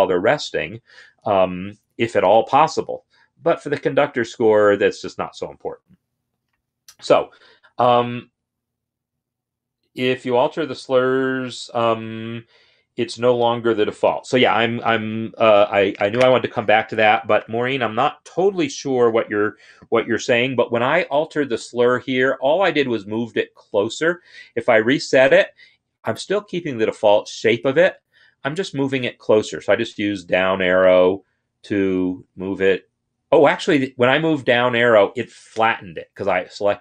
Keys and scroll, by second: 24.4 ctrl+r, 29.4 Down, 29.9 Down, 30.1 Down, 30.3 Down, 31.3-34.0 Down.